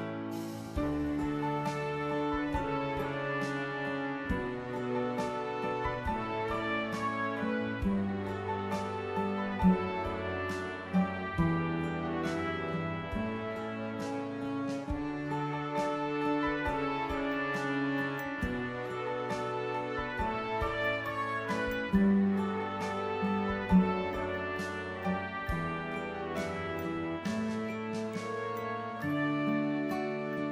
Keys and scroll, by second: 27.2 ctrl+=, 27.4 ctrl+=, 27.6 ctrl+=, 28.9 ctrl+-.